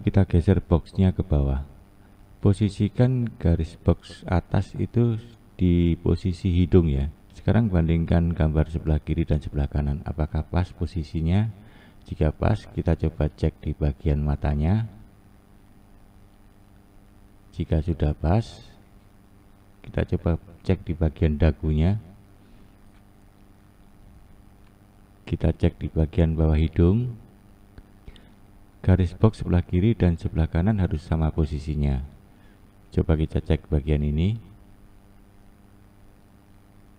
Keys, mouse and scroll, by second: 1.1-5.2 shift+middle drag, 2.7-5.2 scroll up 3, 5.2-7.6 drag, 8.5-11.0 scroll up 5, 11.0-11.9 scroll up 1, 11.9-13.0 scroll up 1, 13.0 scroll up 1, 13.1-15.9 drag, 18.9-23.5 drag, 25.3-27.9 drag, 32.3 click.